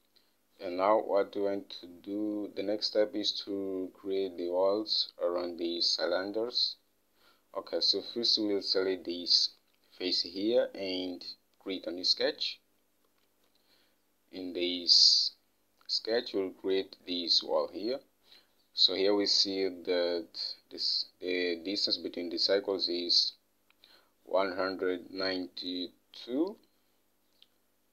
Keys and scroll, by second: 0.0 Home, 13.7 alt+Tab.